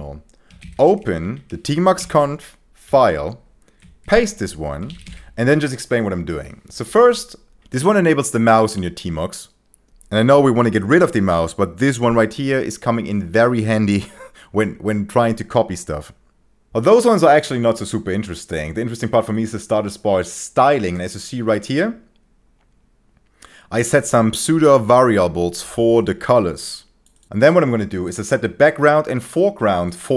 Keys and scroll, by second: 0.2-1.2 typing, 1.2 Up, 2.0 Return, 2.8 Tab, 4.0 ctrl+shift+v, 4.6-5.4 typing.